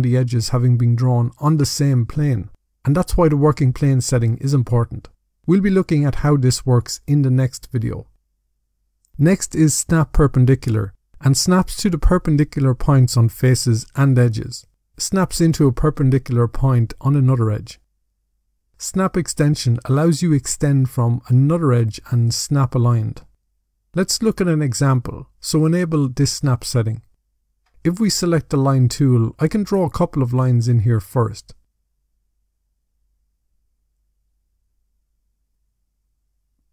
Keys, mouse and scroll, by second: 25.9 click, 29.2 click, 30.2 click, 31.6 shift+click, 33.2 click, 33.7 click, 36.5 shift+click.